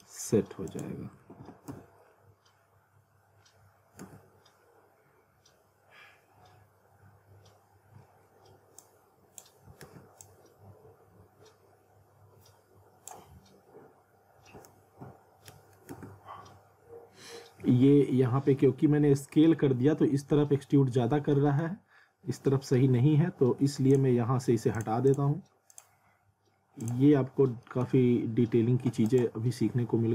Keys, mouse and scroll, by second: 0.7 click, 1.2 w, 1.7 z, 2.0-2.5 scroll up 1, 4.0 z, 4.6-5.2 scroll up 1, 8.8 click, 9.8 ctrl+z, 10.2 click, 13.6-14.1 scroll up 1, 14.8 ctrl+z, 18.6-19.0 scroll up 1, 20.4 z, 20.9-21.3 scroll up 1, 21.3 middle click, 21.9 scroll up 1, 22.8 z, 23.9 click, 27.3-27.6 scroll up 1, 27.6 middle click, 29.1 right click.